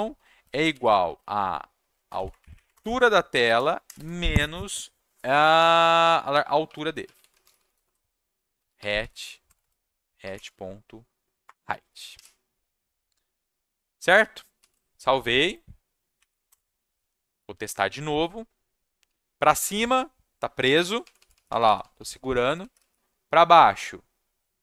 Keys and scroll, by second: 0.0-1.5 typing, 2.0 Down, 2.2 Down, 2.4 Up, 2.5 Up, 2.7 Return, 3.0-4.3 typing, 6.4-10.8 typing, 11.4 Return, 12.1 /, 14.6 ctrl+s, 16.1 Up, 16.5 Return, 19.0 w, 20.7-23.5 typing.